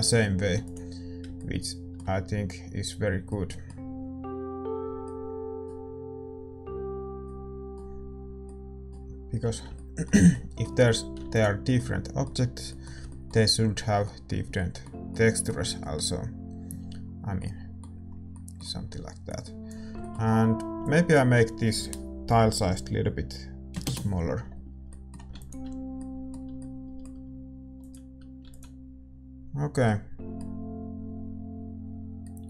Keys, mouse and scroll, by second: 0.7 ctrl+s, 11.2 ctrl+s, 25.4 ctrl+s, 31.9 ctrl+s.